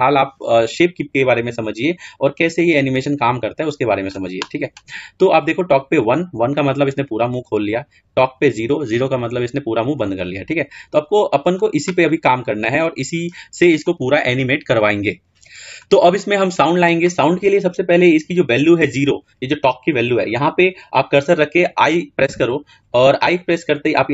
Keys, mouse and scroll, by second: 8.3-10.9 drag.